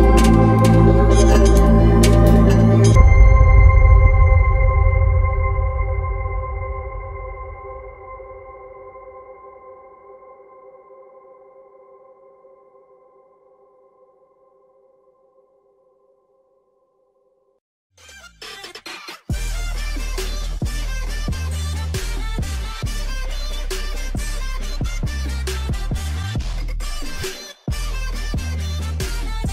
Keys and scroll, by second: 12.4 ctrl+alt+shift+e.